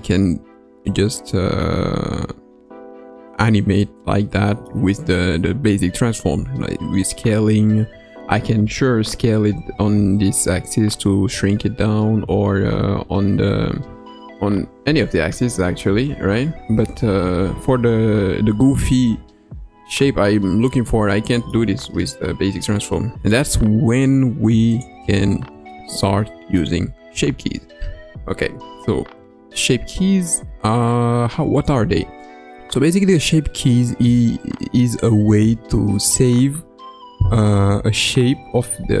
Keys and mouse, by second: 0.8-4.6 middle drag, 7.8 Tab, 9.4 s, 13.8 s, 20.0 Tab, 20.5-21.5 middle drag, 22.7 middle click, 25.6 shift+middle click, 26.2 middle click, 27.0 KP_Decimal.